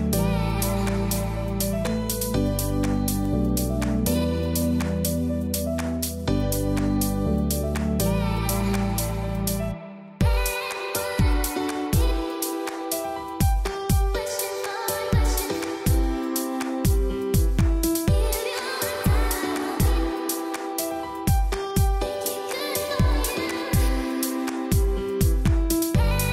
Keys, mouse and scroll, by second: 13.9 q, 14.6 click, 14.9 space, 15.1 click, 15.4 space, 15.7-19.4 drag, 19.5 space, 19.8 click, 20.4 space, 20.6 click, 23.2 click, 24.6-25.3 scroll down 1, 25.3-25.7 scroll up 1.